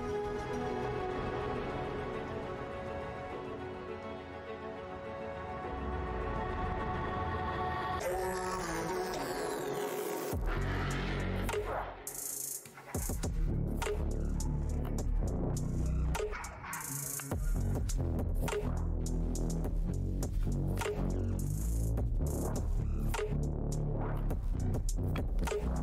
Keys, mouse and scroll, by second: 0.5 Tab, 3.1 click, 7.7 scroll down 1, 9.3 scroll down 1, 10.8 scroll down 1, 11.6 scroll down 1, 13.7 scroll down 1, 14.8 scroll down 1, 16.5 ctrl+Tab, 18.9 scroll down 1, 21.4 click, 21.9 right click, 23.2 click, 23.8 click, 23.8 alt+Tab, 24.4 ctrl+v, 25.2 click.